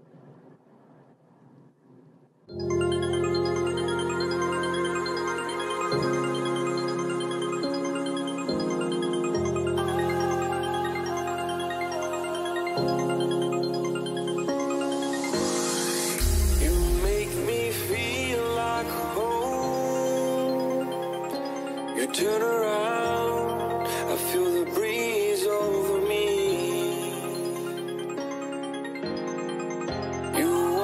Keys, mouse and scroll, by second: 0.0-2.2 right drag, 2.2 z, 2.9-5.3 middle drag, 6.5 a, 7.9-9.9 drag, 8.6-11.3 right drag, 10.6 Delete, 11.8-13.4 middle drag, 15.1 a, 15.4 a, 16.0-18.6 right drag, 16.8 a, 17.7 click, 18.6 middle click, 19.3 a, 19.3 click, 19.5-22.0 middle drag, 19.5 a, 20.3-22.0 right drag, 22.0 click, 22.4 Delete, 29.5 middle click, 30.4 a.